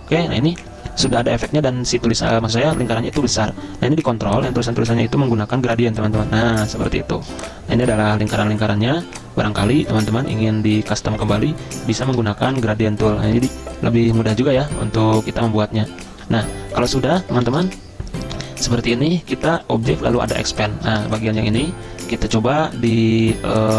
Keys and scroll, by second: 17.5 ctrl+z.